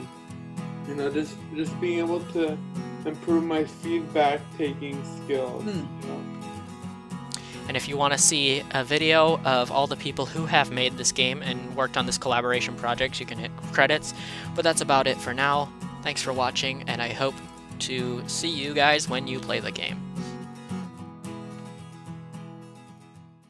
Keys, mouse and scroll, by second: 6.4 click, 14.6 click.